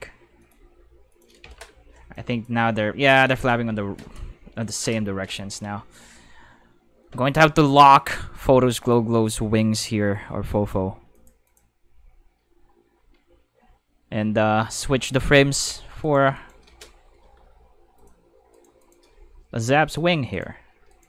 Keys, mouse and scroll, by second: 0.0-1.1 typing, 0.4 click, 1.1 click, 1.4 Tab, 2.1 click, 2.6 space, 3.2 space, 6.1 middle click, 8.8 click, 11.1 click, 11.5 click, 13.6 Tab, 16.0 click, 16.0 right click, 16.3 shift+click, 16.3 shift+right click, 16.9-17.8 typing, 18.0 click, 18.5 right click, 18.8 shift+right click, 18.8-19.8 typing, 19.8 click, 20.3 right click, 20.9 shift+right click.